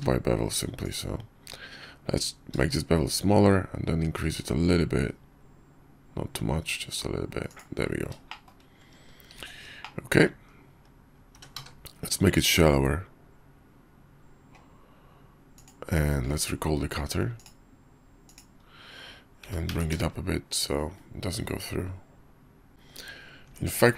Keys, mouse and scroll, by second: 8.3 shift+drag, 9.3 shift+2, 9.8-10.2 drag, 10.4 KP_5, 11.3 s, 16.2 q, 19.4 g, 23.4 Tab.